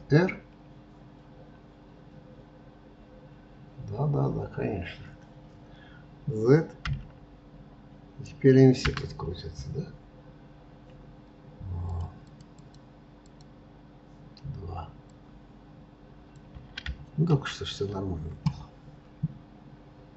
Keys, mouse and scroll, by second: 11.9 click, 12.3-14.1 drag, 15.2 click, 17.5 ctrl+z.